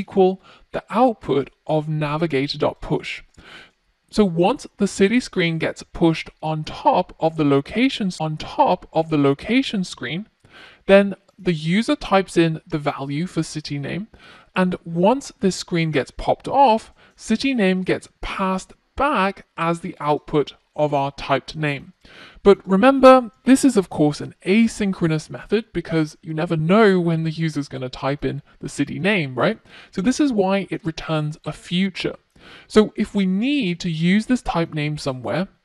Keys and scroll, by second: 23.7 F1.